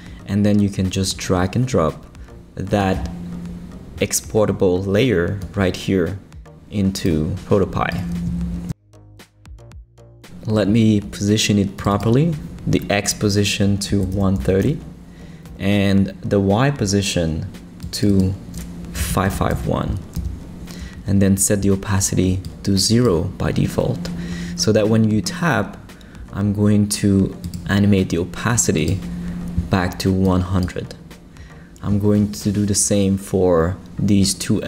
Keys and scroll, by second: 13.7-14.9 typing, 19.1 5, 19.5 l, 20.2 Return.